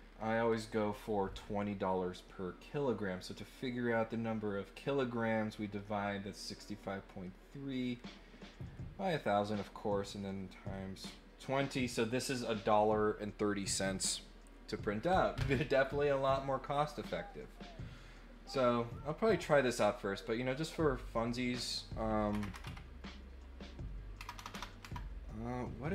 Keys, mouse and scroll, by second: 20.6 click.